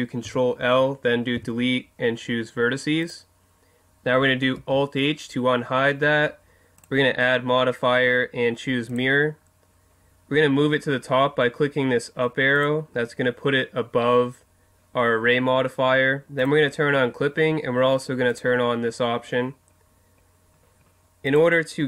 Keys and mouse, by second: 0.2 ctrl+l, 1.3 Delete, 4.6 alt+h, 6.8-8.6 drag, 12.5-14.3 drag, 16.4-20.4 drag.